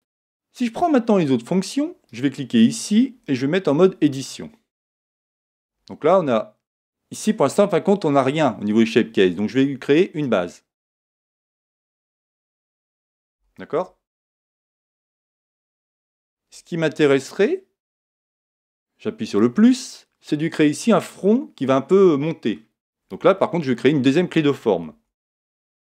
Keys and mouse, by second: 2.1-4.0 right drag, 3.7 Tab, 4.9 a, 5.6 Tab, 10.2-13.5 drag, 21.0 click, 22.0-25.1 middle drag, 24.9 Tab, 25.4-25.9 middle drag.